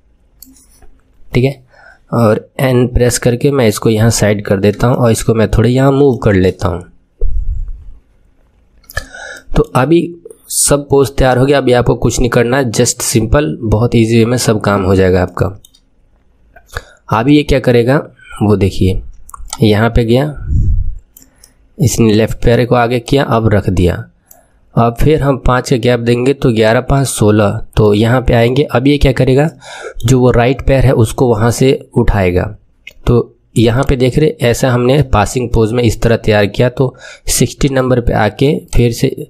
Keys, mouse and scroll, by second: 3.0 n, 4.8-7.8 shift+middle drag, 9.3-14.1 shift+middle drag, 14.1 KP_3, 15.2-17.8 shift+middle drag, 17.8-19.4 scroll down 8, 19.4-21.3 drag, 21.3-23.0 middle drag, 23.0-25.9 drag, 26.6-29.4 drag, 29.4 middle click, 29.9-32.4 middle drag, 33.7 click, 34.9 middle click, 37.6 click, 38.7 click.